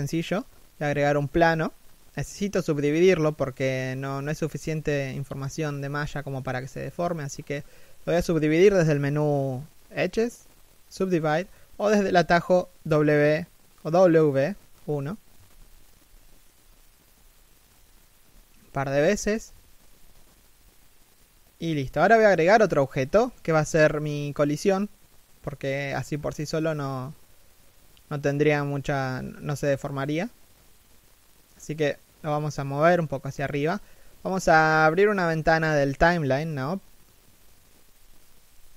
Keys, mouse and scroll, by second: 5.8 w, 19.3 middle click, 21.2 z, 21.4 middle click, 22.1 z, 23.1 7, 25.8 middle click, 26.5 z, 26.8 middle click, 28.6 1, 29.3 z, 29.5 middle click, 29.8 z, 30.0 right click, 35.2 middle click.